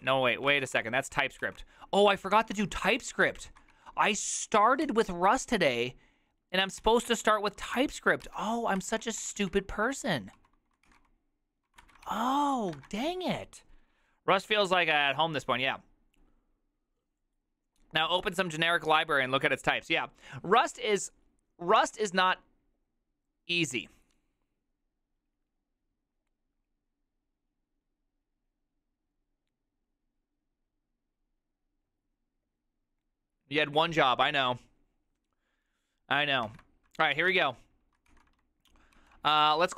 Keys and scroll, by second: 0.1 ctrl+r, 0.2 ctrl+r, 0.4-4.3 typing, 1.5 ctrl+n, 4.9 ctrl+t, 6.9-7.8 typing, 8.3 ctrl+c, 8.9 ctrl+d, 9.0 ctrl+d, 9.3 ctrl+d, 9.5 ctrl+d, 9.7-12.8 typing, 37.2-38.2 typing, 39.1 ctrl+c, 39.5-39.7 typing.